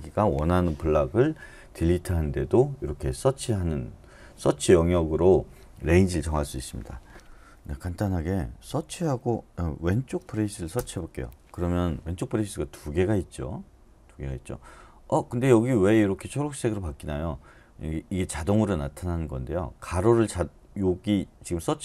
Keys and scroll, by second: 8.7-10.4 typing, 10.7 Return.